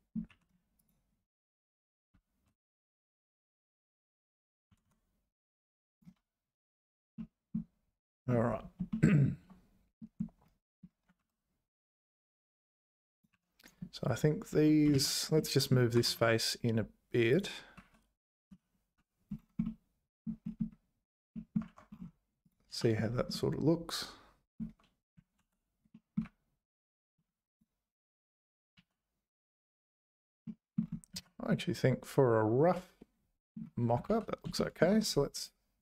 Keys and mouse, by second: 0.3 2, 2.1 `, 2.8 `, 4.7 g, 6.1 `, 7.3 middle click, 9.0 shift+middle click, 11.8 `, 11.8 1, 12.7 click, 13.3 3, 14.9 ctrl+z, 15.8 g, 17.9 `, 18.5 z, 19.7 middle click, 21.5 click, 21.6 Tab, 22.7 h, 23.3-25.1 middle drag, 25.4 alt+h, 25.9 click, 26.2 `, 28.7 z, 30.4 click, 31.1 z, 31.5-33.5 drag, 34.0 `, 34.5 click, 35.3 click.